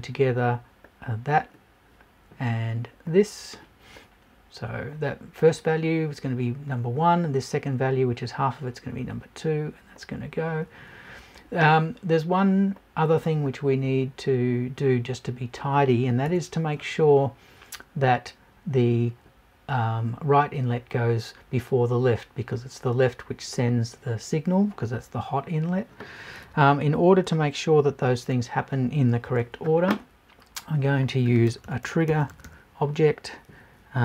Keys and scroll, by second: 16.3 BackSpace.